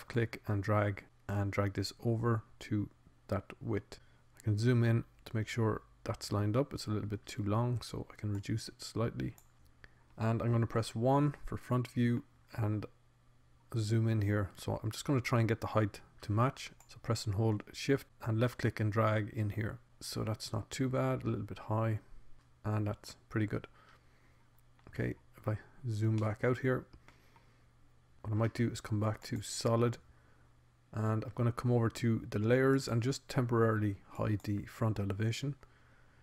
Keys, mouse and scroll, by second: 1.2-3.0 drag, 6.0-7.3 middle drag, 8.6-9.8 drag, 10.8 middle click, 12.4 KP_1, 17.0 click, 21.2 middle click, 21.8-23.6 drag, 23.6 middle click, 24.6 middle click, 25.6 click, 27.2-30.2 middle drag, 30.2 z.